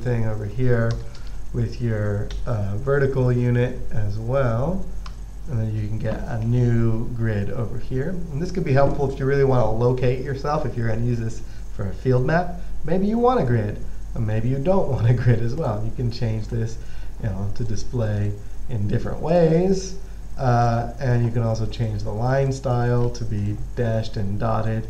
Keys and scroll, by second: 1.6-3.7 typing, 5.4 Return.